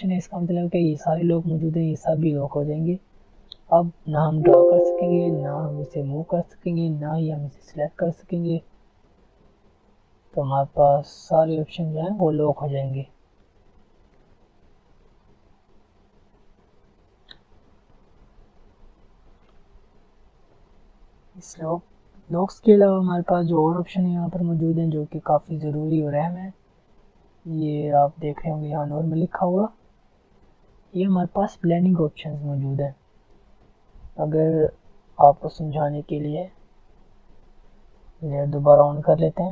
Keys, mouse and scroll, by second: 1.9 click, 2.0 alt+scroll down 2, 2.1-2.7 alt+scroll up 2, 3.5 click, 8.2 ctrl+z, 9.0 click, 12.2 alt+scroll down 1, 12.7 alt+scroll up 1, 12.9 alt+scroll down 1, 13.7 alt+scroll up 1, 14.4 alt+scroll down 1, 15.1 alt+scroll up 1, 16.6 click, 18.8 F10, 21.0 click, 22.5 alt+scroll down 1, 22.8 alt+scroll up 1, 23.5 alt+scroll up 1, 24.0 alt+scroll down 1, 24.3 alt+scroll up 1, 24.7 alt+scroll down 1, 25.3 alt+scroll down 1, 25.7 alt+scroll up 1, 26.1 alt+scroll down 1, 26.5 alt+scroll up 1, 26.6 alt+scroll down 1, 27.0 alt+scroll up 1, 29.6 click, 33.2 click, 33.4 click.